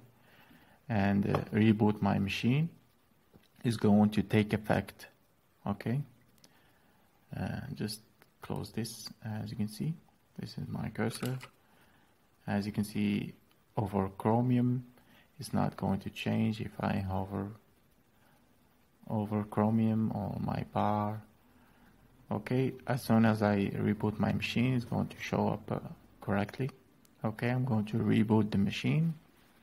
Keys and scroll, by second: 11.0 alt+é.